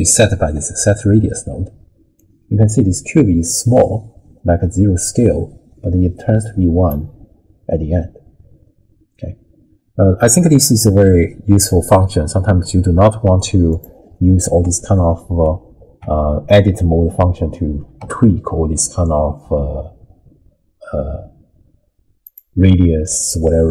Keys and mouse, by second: 2.3-6.9 drag, 14.6 n, 16.0 Tab, 18.0 t, 22.3 click, 23.4-23.7 drag.